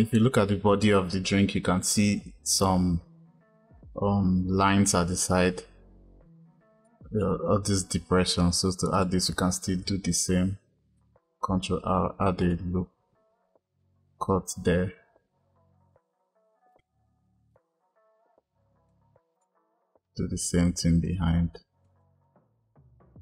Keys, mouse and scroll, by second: 6.7-8.9 drag, 10.8 ctrl+r, 16.1 ctrl+r, 17.9 click, 19.3 click, 19.4 middle click, 20.9 shift+click, 22.0 click.